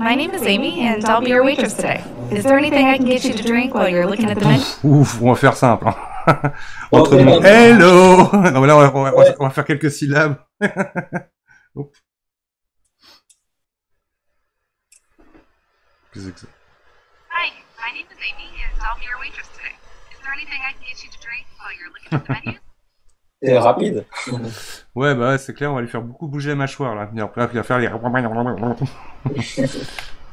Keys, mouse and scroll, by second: 30.0-30.3 middle drag.